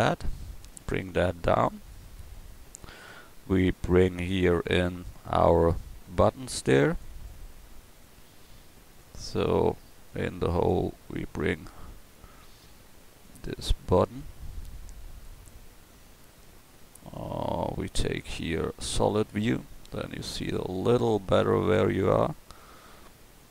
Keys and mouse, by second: 0.6-2.3 right drag, 2.4-3.1 middle drag, 9.0-11.0 middle drag, 19.6 click.